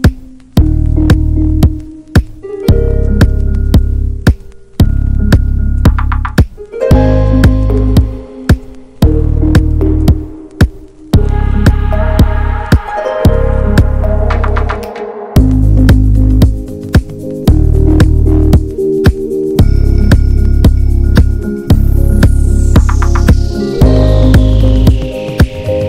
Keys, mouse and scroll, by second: 0.2 s, 2.2 alt+z, 2.4 middle click, 3.3 ctrl+b, 4.7 middle click, 5.3 ctrl+z, 5.6 middle click, 6.1 alt+z, 6.9 s, 8.8 alt+z, 9.1 middle click, 9.6 ctrl+b, 11.7 Tab, 12.0 alt+middle click, 12.7 middle drag, 13.0 scroll up 1, 13.1 click, 13.2 ctrl+a, 13.7 scroll down 2, 13.9-16.4 middle drag, 16.4-16.7 drag, 16.7-17.4 middle drag, 17.4 Tab, 17.7 middle click, 18.3 scroll up 2, 18.6 shift+middle click, 19.5 s, 21.3 middle click, 21.6 Tab, 21.7 drag, 22.0-22.6 middle drag, 22.6 Tab, 23.0 click, 23.3-24.4 shift+middle drag, 24.4 shift+click, 24.8 middle click, 25.3 scroll up 1, 25.6 middle click.